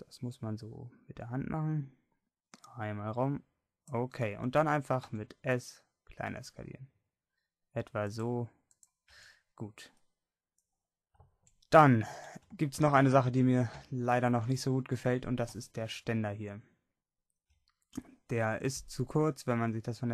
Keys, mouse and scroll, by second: 5.2 click, 5.2 s, 9.2 Tab, 11.3-12.3 middle drag, 17.7-19.3 middle drag.